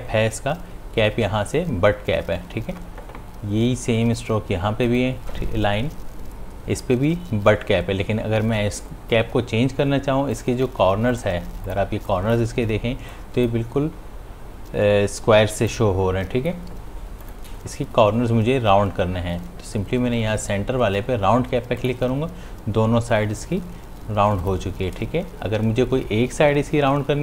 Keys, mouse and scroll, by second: 5.1 click, 10.4 click, 11.1 space, 11.4 ctrl+click, 13.1 space, 13.3 click, 13.8 space, 16.0 click, 16.3 space, 17.5 click, 21.8 click, 22.4 click, 24.6 click.